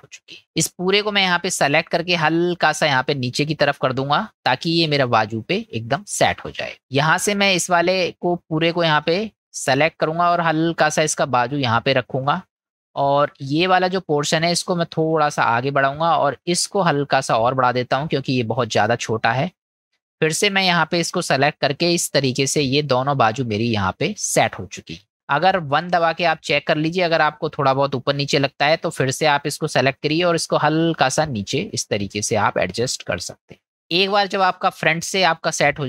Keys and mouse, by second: 0.3 click, 2.3-6.4 drag, 6.8 click, 8.4-10.3 drag, 13.4 click, 14.5 click, 17.5-18.9 drag, 19.2 click, 19.9 click, 21.4-22.4 drag, 23.6 middle click, 24.2 click, 25.1 middle click, 25.9 KP_1, 28.8 click, 30.5-33.6 drag.